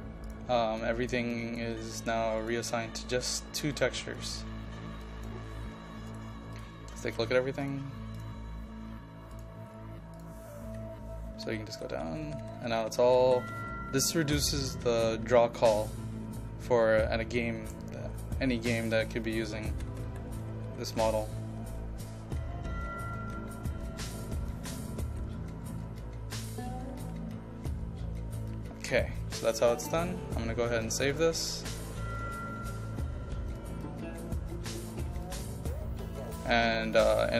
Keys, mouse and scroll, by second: 1.4 ctrl+click, 2.5 click, 7.1 ctrl+a, 7.7 click, 9.8-10.2 scroll up 1, 10.2 click, 11.5-12.7 typing, 24.7 typing, 27.9 typing, 30.1 click, 35.0 click, 36.7 ctrl+click.